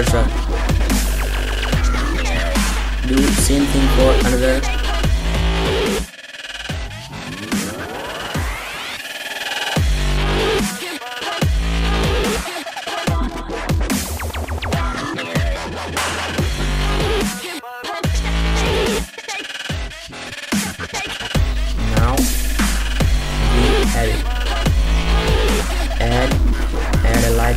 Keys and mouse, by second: 0.9 middle click, 1.8-2.2 middle drag, 2.8 right click, 2.9 middle click, 3.1 click, 3.3 shift+s, 3.8 right click, 4.6-6.5 typing, 7.0-7.5 middle drag, 7.7 middle drag, 8.0 right click, 8.1 shift+s, 8.8 shift+s, 9.0 click, 9.2 shift+d, 9.4 shift+s, 9.7 click, 10.0 middle click, 10.3 middle drag, 10.6 click, 10.8-11.1 middle drag, 11.1 click, 11.4 middle drag, 11.9 shift+s, 12.5 shift+d, 12.9 shift+s, 13.7 click, 14.4 shift+s, 14.6 shift+s, 15.0 shift+d, 15.3 shift+s, 15.6 click, 15.8 right click, 16.2 right click, 16.3 shift+s, 16.6 right click, 16.7 shift+d, 16.9 shift+s, 17.3 shift+s, 17.7 right click, 18.0-18.3 middle drag, 18.5 shift+s, 19.6 drag, 19.9 drag, 20.7 shift+d, 20.9 m, 21.3 shift+s, 21.8 click, 22.2 middle click, 23.0 middle click, 23.6-25.2 middle drag, 25.2-26.7 typing, 27.2 drag.